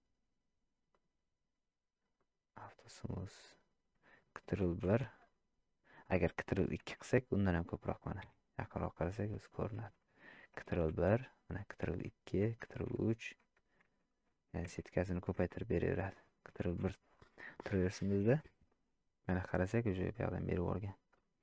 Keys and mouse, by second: 2.2 click, 4.8 ctrl+1, 6.8 ctrl+2, 8.2 KP_Decimal, 9.5 shift+click, 10.9 ctrl+1, 11.8 ctrl+2, 13.9 ctrl+5, 16.6 ctrl+1.